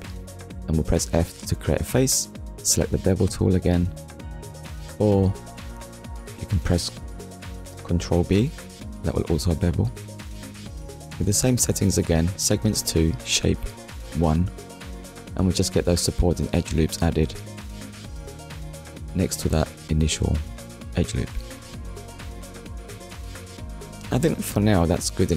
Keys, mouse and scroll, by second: 0.8 click, 4.3 click, 5.1 alt+click, 6.1 shift+click, 6.8 shift+click, 7.5 shift+click, 8.0 middle click, 10.2 click, 12.7 click, 19.4 click, 20.2 click, 20.9 Tab, 21.5 click, 21.8 middle click, 25.0 middle click.